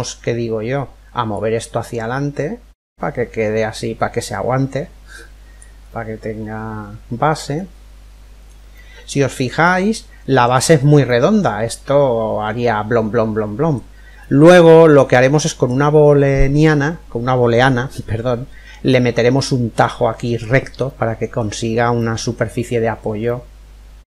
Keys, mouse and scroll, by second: 0.9 click, 5.4-7.3 middle drag, 8.4-12.4 middle drag, 13.8-15.7 middle drag, 20.5-24.1 middle drag.